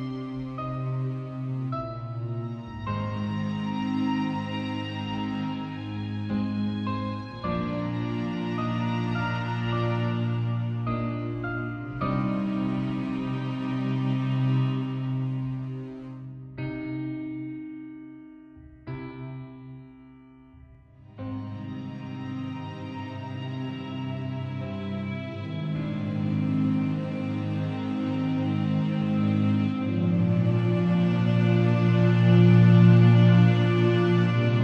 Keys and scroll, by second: 1.8 v, 3.9 super+Tab, 16.8 Return, 30.3 shift+super+t, 30.9 alt+shift+super+t.